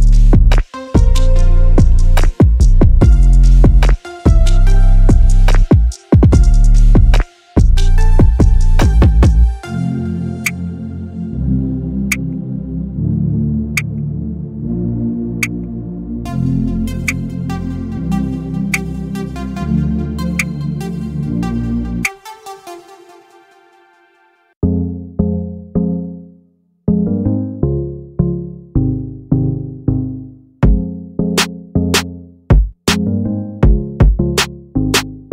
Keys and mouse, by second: 0.2-1.8 middle drag, 2.1 ctrl+z, 7.7 shift+click, 9.2 z, 10.4 x, 11.6 middle click, 12.7 click, 14.2 shift+click, 15.5 ctrl+z, 16.0 shift+click, 16.2 shift+click, 17.4 shift+click, 19.0 f, 21.0 click, 22.7 i, 25.9 KP_1, 27.2 e, 32.2 Tab, 33.3 click.